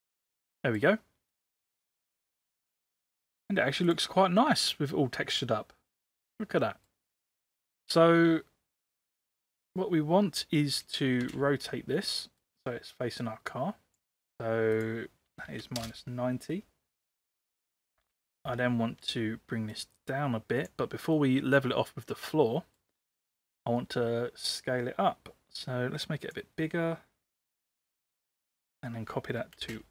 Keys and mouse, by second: 0.2-0.8 middle drag, 1.3 click, 2.0-2.4 middle drag, 3.0-3.4 middle drag, 3.8 click, 4.8-6.9 middle drag, 8.8 click, 11.1 space, 12.1 middle click, 13.2 click, 14.7-16.0 drag, 17.9 space, 18.6-19.1 shift+middle drag, 19.7 click, 21.3-22.9 middle drag, 23.3 space, 24.6-26.3 drag, 27.6 ctrl+c, 28.0 ctrl+v, 28.4 ctrl+v, 29.5 space.